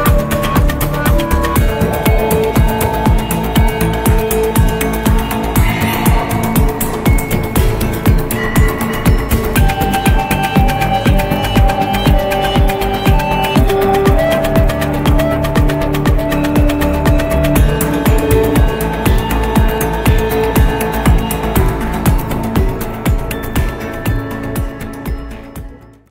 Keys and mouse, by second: 2.3 g, 3.5 middle click, 4.6 r, 8.0-9.9 middle drag, 10.1-26.1 middle drag.